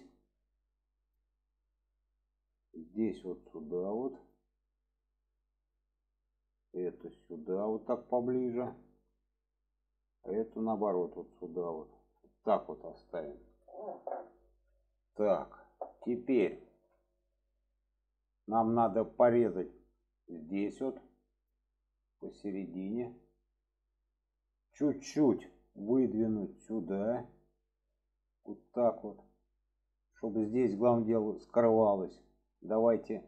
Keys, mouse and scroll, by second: 2.1-2.5 drag, 3.1 click, 5.5 click, 6.2-8.7 drag, 8.9 shift+middle click, 9.9-10.4 drag, 11.0 click, 13.6 shift+middle drag, 14.1-15.6 middle drag, 15.8 middle click, 16.7 alt+z, 17.0-18.7 middle drag, 19.1 middle click, 20.5 click, 21.4 click, 22.7 click, 23.1 middle click, 24.1 shift+middle click, 25.4 middle click, 26.1-28.6 drag, 28.8-29.5 middle drag, 30.5 shift+middle drag, 31.5 middle click, 32.5 shift+middle drag.